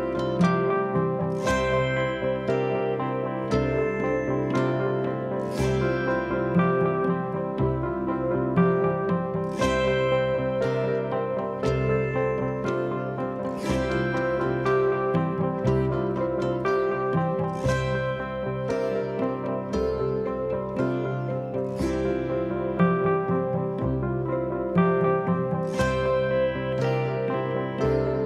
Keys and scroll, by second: 0.8 p, 2.1 p, 3.0 p, 3.9 p, 4.8 p, 6.1 4, 8.9 ctrl+z, 11.5 ctrl+z, 15.6 ctrl+z, 21.7 3, 23.3 F1, 23.4 F2, 24.6 p, 26.6 p, 27.6 p.